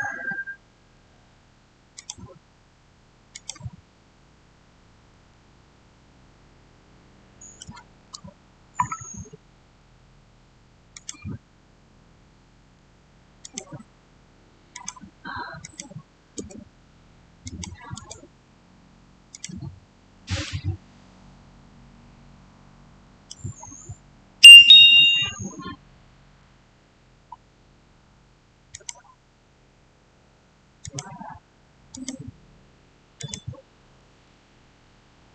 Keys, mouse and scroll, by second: 1.8 click, 5.0 click, 5.2 shift+middle click, 6.0 shift+scroll down 1, 10.8 shift+scroll down 1, 10.8 click, 13.3 click, 16.3 Return, 17.3 click, 17.8 right click, 19.2 click, 20.3-25.9 shift+middle drag, 27.3 scroll up 1, 28.6 click, 30.7 click.